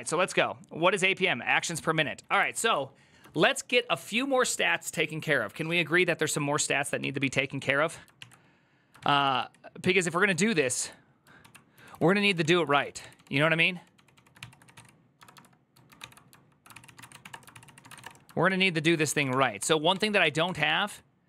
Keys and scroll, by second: 2.4 alt+{, 2.7-4.0 typing, 6.8 ctrl+t, 7.9 ctrl+n, 8.8 ctrl+t, 9.0 ctrl+c, 11.3-15.1 typing, 15.7 ctrl+x, 15.8 ctrl+f, 16.5-17.7 typing, 17.8 Return, 18.2 ctrl+s, 18.5 ctrl+c, 18.8 typing, 18.9 Return, 19.0 ctrl+d, 19.4 ctrl+d, 20.0 ctrl+d, 20.4 shift+g, 20.6 ctrl+u.